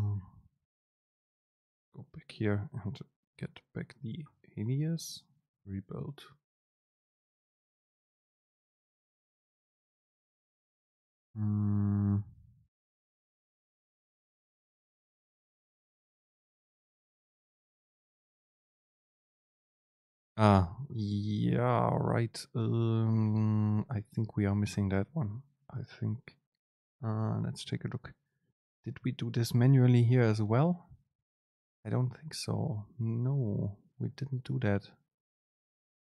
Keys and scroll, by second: 2.0 super+space, 6.4 super+z, 18.5 super+space.